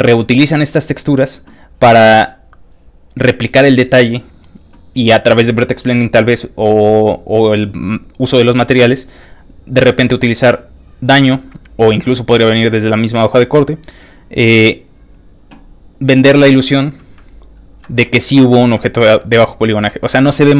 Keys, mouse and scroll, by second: 11.4 click, 14.0 click, 15.9 click, 16.5 click, 17.5 scroll up 2, 17.9 scroll down 1, 17.9 scroll up 1, 18.0 ctrl+middle click, 18.9 ctrl+scroll down 2, 19.5 ctrl+middle click, 19.6-20.5 scroll down 3, 19.9 ctrl+middle click, 20.4 ctrl+middle click.